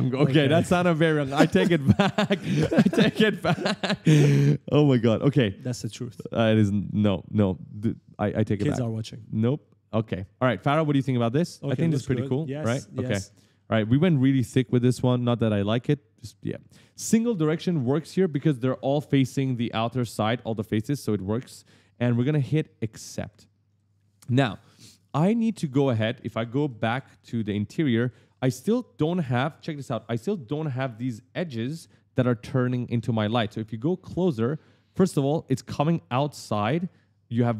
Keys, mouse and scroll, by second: 0.0 right click, 0.1 right click, 0.2 right click, 0.3 right click, 0.5 right click, 0.6 right click, 0.8 right click, 1.1 right click, 1.3 right click, 1.7 right click, 1.9 right click, 2.0 right click, 2.2 right click, 2.2-4.4 typing, 2.4 right click, 3.3 right click, 3.5 right click, 3.8 right click, 4.0 right click, 4.5 right click, 5.2 right click, 6.5 right click, 7.1 right click, 7.9 click, 8.6 right click, 8.7 right click, 9.0 right click, 9.4 right click, 10.0 right click, 10.7 right click, 11.0-14.2 typing, 11.3 right click, 11.6 right click, 11.9 right click, 12.1 right click, 12.7 right click, 13.9 right click, 14.0 right click, 14.2 right click, 14.2 right click, 14.4 right click, 14.5 right click, 23.0 click, 23.8 right click, 24.0 right click, 24.2 right click, 24.2 right click, 25.6 right click, 25.6-27.8 typing, 26.8 right click, 27.0 right click, 27.2 right click, 27.3 right click, 30.0-30.4 scroll up 1, 30.4-30.7 scroll down 1, 30.8 middle click, 33.0 scroll up 1, 33.5 middle click, 33.9 scroll up 1, 34.3 middle click.